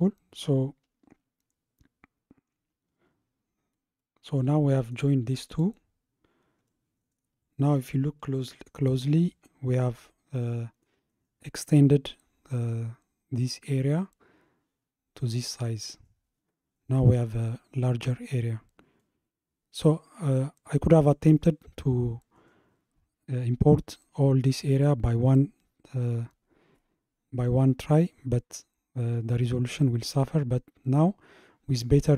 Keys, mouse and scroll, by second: 1.5-3.1 scroll down 1, 3.1-4.1 scroll down 1, 4.1-5.5 middle drag, 5.5 click, 6.1 scroll down 3, 6.7-7.3 middle drag, 7.3-9.0 scroll up 5, 9.0-9.5 scroll up 1, 9.5-11.2 shift+middle drag, 11.2-12.2 scroll down 1, 12.2-14.2 scroll down 1, 18.6-19.0 scroll down 1, 19.0-21.1 middle drag, 21.1-24.1 scroll up 1, 29.9-30.9 scroll up 1, 30.9 scroll up 1.